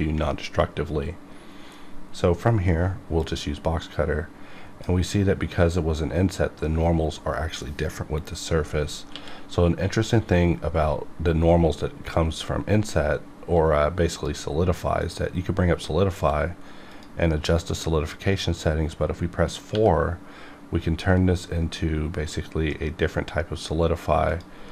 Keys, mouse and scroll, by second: 3.5-6.6 drag, 6.6 right click, 9.1 q, 13.4 q, 14.1 click, 16.1 q, 16.9 click, 19.7 4.